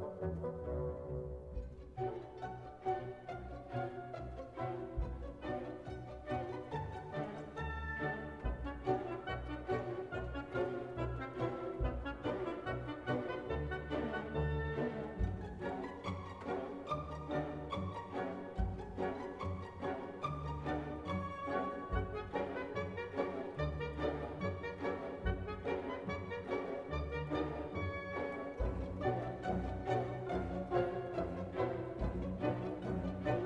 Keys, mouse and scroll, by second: 0.6 click, 1.2 click, 2.6 scroll down 1, 3.1-3.6 scroll up 1, 4.2 scroll down 1, 4.7-5.0 scroll up 1, 5.2 scroll down 1, 5.7-6.2 scroll up 1, 6.6-7.0 scroll down 1, 8.0 scroll down 1, 8.6 scroll down 1, 9.4-9.8 scroll up 2, 9.9 scroll down 2, 10.4 scroll down 2, 11.9 click, 15.1 click, 16.7 click, 18.5 click, 22.0 click, 25.4-26.4 drag, 28.3 click, 30.7 click, 33.3 click.